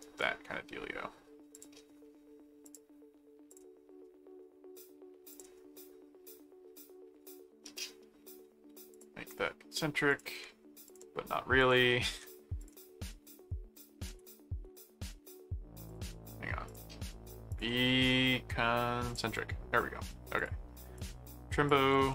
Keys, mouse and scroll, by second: 0.0 right click, 1.5 click, 2.6 click, 3.5 click, 5.3 click, 8.9 click, 10.1 click, 10.8 ctrl+click, 11.6 ctrl+alt+click, 12.0 ctrl+alt+a, 12.6 click, 13.1 middle click, 13.7 alt+click, 14.1 alt+v, 14.4 ctrl+alt+1, 14.7 ctrl+click, 15.9 click, 16.6 ctrl+click, 17.5 ctrl+click, 19.0 click, 20.4 click, 21.0 click, 21.7 click.